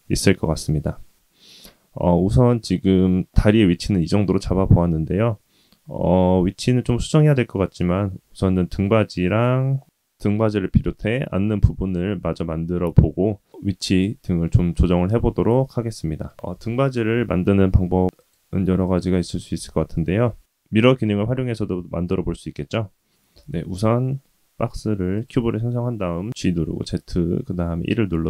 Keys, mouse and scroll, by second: 0.6-7.8 middle drag, 9.2 click, 15.5-17.1 middle drag, 16.6 click, 16.6 KP_1, 17.1 scroll down 1, 17.6 shift+middle click, 19.2 shift+a, 22.5 g, 26.9-28.2 drag.